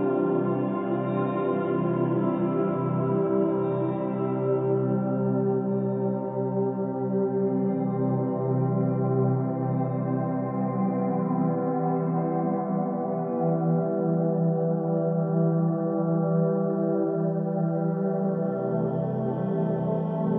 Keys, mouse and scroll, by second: 4.7-9.2 middle drag, 10.1 click, 10.8 click, 17.2 click, 18.9-20.3 middle drag.